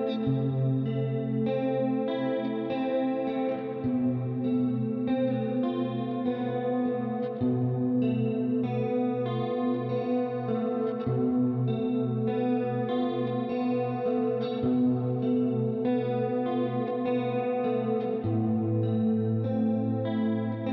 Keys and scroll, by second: 1.9-2.9 typing, 5.0 typing, 8.9-9.3 typing, 9.2 Return, 11.4 typing.